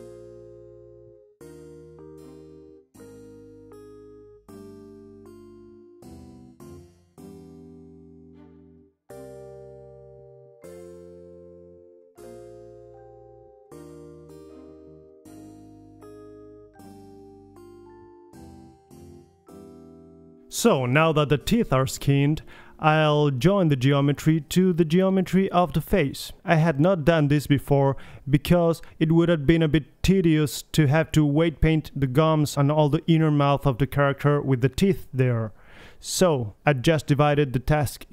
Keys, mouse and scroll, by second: 2.1 click, 2.5 Tab, 4.2 click, 4.5 g, 5.1-5.5 middle drag, 5.9 g, 6.9-7.4 drag, 7.7 middle click, 7.9 drag, 8.5-8.9 middle drag, 8.9-9.5 drag, 9.5 middle click, 9.6 Tab, 10.2-11.4 drag, 11.4 right click, 11.6 ctrl+l, 12.9 click, 13.5 middle click, 13.8 click, 15.7 ctrl+l, 17.6 Tab, 18.7-19.6 drag, 19.2 g, 20.7-21.6 middle drag, 20.8 g, 22.3-23.5 middle drag, 23.0 KP_3, 25.5-27.5 middle drag, 27.5-29.2 drag, 30.0 alt+h, 31.4 click, 31.8 a, 32.0 a, 32.4 alt+g, 32.6 alt+r, 33.0 alt+a, 33.3 z, 33.9 middle click, 35.0 click, 36.1 click, 36.4 click, 37.1-38.1 middle drag.